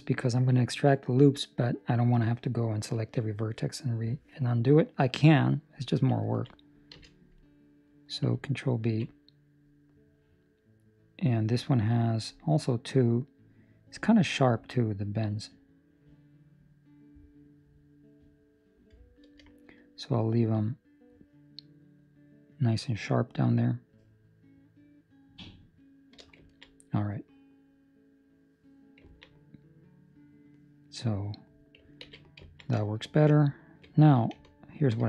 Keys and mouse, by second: 0.2 middle click, 4.2 middle click, 6.2 ctrl+middle click, 6.9 z, 7.3 middle click, 8.8 ctrl+b, 26.4 ctrl+middle click, 26.7 middle click, 27.3 ctrl+middle click, 29.0 ctrl+middle click, 32.0 ctrl+s, 32.4 ctrl+middle click, 32.7 shift+middle click, 33.6 alt+right click, 34.7 alt+right click.